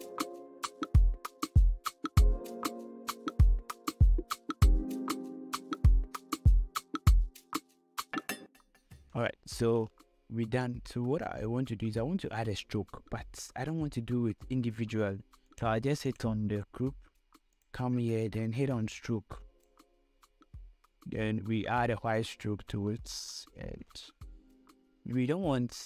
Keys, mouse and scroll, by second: 2.2 ctrl+., 2.6 ctrl+t, 3.0-7.4 drag, 7.4 click, 7.7 ctrl+t, 7.8 click, 8.2 ctrl+., 8.5-9.6 drag, 9.6 scroll down 1, 10.2 scroll up 1, 15.8-22.4 drag.